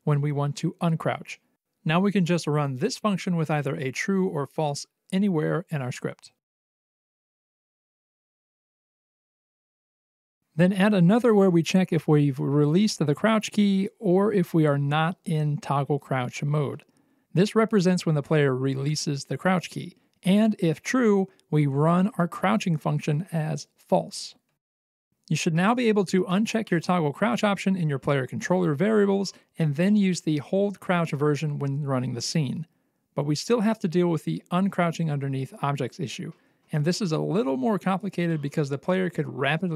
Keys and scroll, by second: 2.7-7.3 typing, 8.8-10.3 typing, 24.8 Escape, 27.8 c, 29.3 c, 32.8 w, 38.7 c.